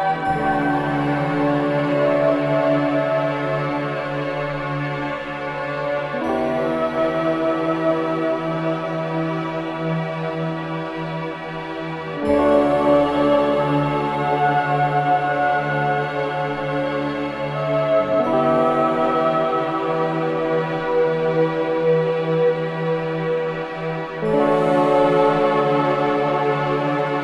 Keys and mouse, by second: 1.1 s, 3.1 click, 4.2 g, 5.5 z, 7.8-8.9 drag, 9.2 g, 9.6 x, 10.6-11.7 drag, 12.0-16.2 drag, 12.0 typing, 17.1 click, 17.1 typing, 19.2 Tab, 20.3 BackSpace, 20.5 1, 24.7 1, 25.6 Tab, 27.1 click.